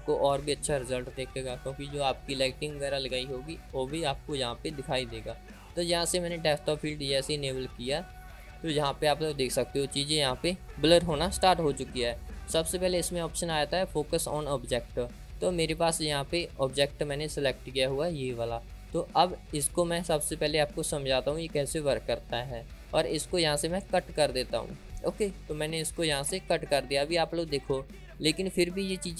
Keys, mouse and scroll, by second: 8.9-9.9 drag, 24.3-25.8 drag.